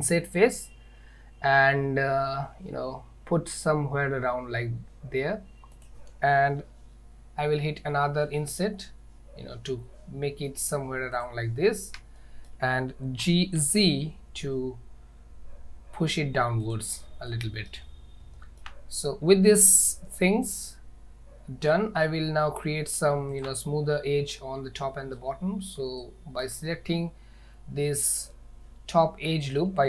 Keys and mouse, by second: 12.2 shift+middle click, 13.3 g, 17.3 middle click, 18.4 shift+middle click, 20.5 click, 21.8 middle click, 23.4 alt+click, 24.5 shift+middle click, 26.1 shift+middle click, 29.4 shift+middle click.